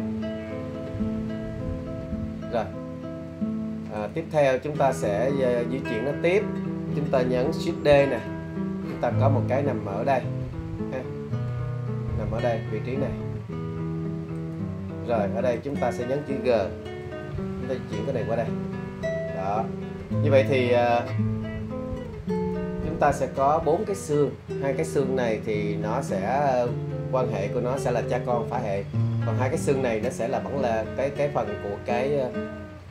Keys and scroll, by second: 8.0 shift+d, 17.0 g.